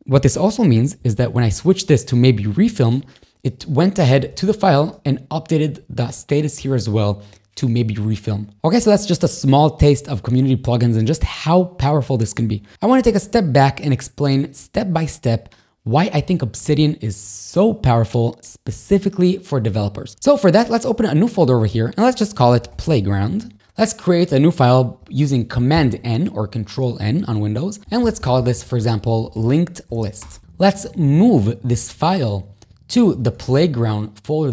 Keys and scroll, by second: 25.8 super+n, 27.6-29.9 typing, 30.2 Return, 31.8 shift+super+m, 33.1 p, 34.4 y.